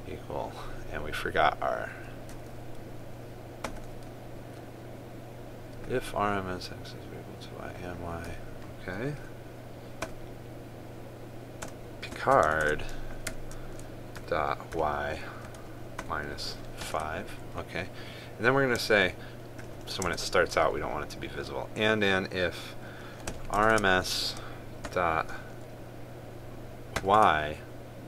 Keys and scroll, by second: 13.2 ctrl+space, 24.3 ctrl+space.